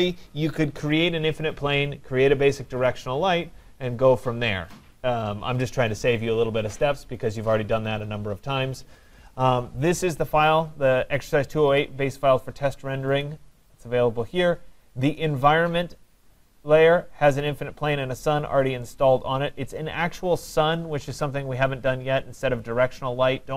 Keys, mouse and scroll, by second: 13.2-15.6 drag, 16.3 click, 18.6-21.3 drag.